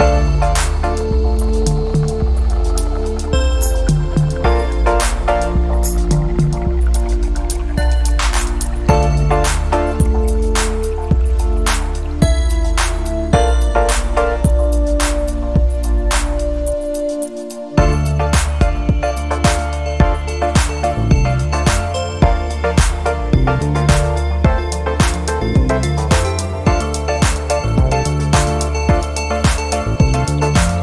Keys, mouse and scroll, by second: 0.2 click, 0.9 ctrl+click, 2.5 click, 4.8 click, 6.1 click, 7.4 click, 8.2-15.3 drag, 15.2 0, 16.7 click, 17.4 right click, 18.6 click, 19.7 click, 21.4 click, 22.3 click, 22.9 click, 24.1 click, 24.6-30.8 drag.